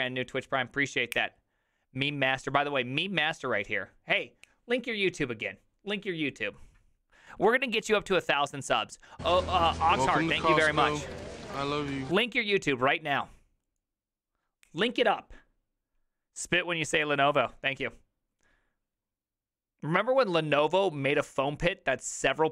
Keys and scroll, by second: 10.9-12.1 typing.